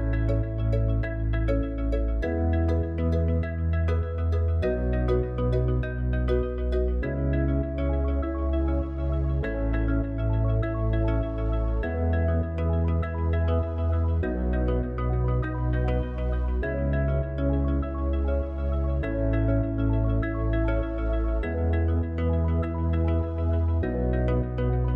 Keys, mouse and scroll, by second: 13.5 click, 16.9-17.5 drag, 19.1 r.